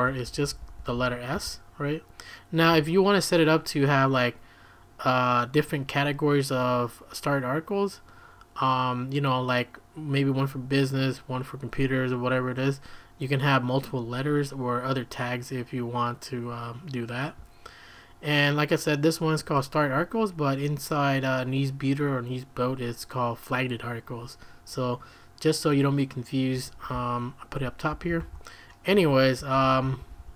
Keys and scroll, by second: 0.0-1.8 typing, 26.5 Escape, 26.7-30.3 typing, 28.9 Escape, 29.1 Escape.